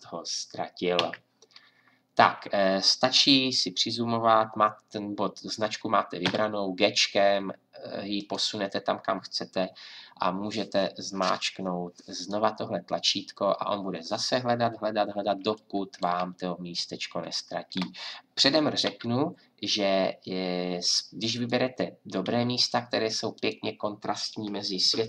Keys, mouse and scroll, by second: 1.0 Left, 4.2-6.2 drag, 6.2 g, 18.9 g, 22.2 g.